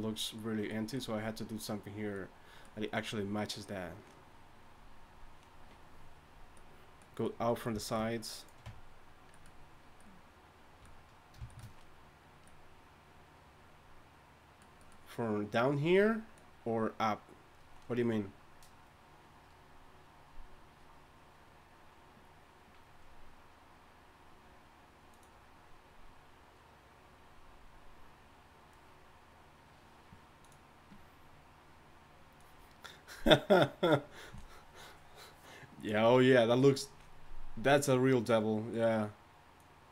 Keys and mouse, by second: 8.9 Tab.